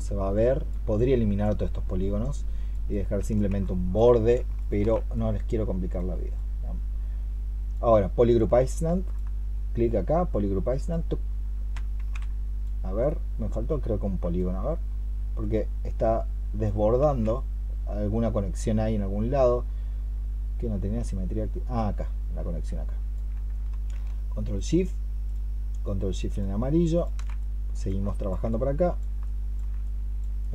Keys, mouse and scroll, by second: 3.5 alt+click, 4.4 ctrl+shift+click, 8.7 ctrl+shift+Left, 11.9 ctrl+z, 16.9 ctrl+z, 24.4 ctrl+shift+click, 26.1 ctrl+shift+click, 27.9 ctrl+shift+Left, 29.1 alt+click.